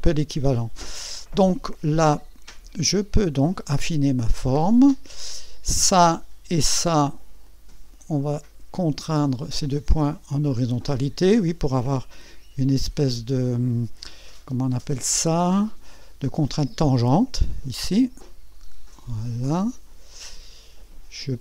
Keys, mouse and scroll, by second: 3.1-4.6 drag, 5.7 click, 7.4 click, 9.7 click, 18.5 click.